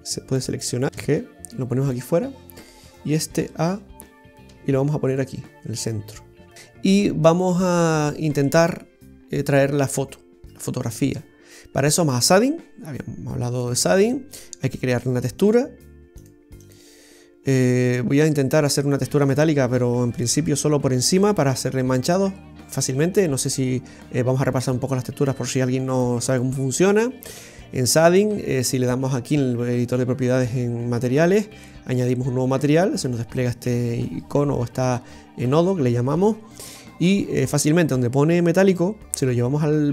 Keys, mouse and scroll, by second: 1.0 g, 2.3 scroll up 1, 3.2 scroll up 1, 4.6 g, 12.8 click, 13.7 middle click, 13.7-14.2 scroll down 3, 17.8 scroll down 2, 18.1 middle click, 20.0 scroll up 5, 20.3 middle click, 23.0-23.6 scroll down 5, 23.5 middle click, 25.3 click, 26.5 middle click, 38.8 click.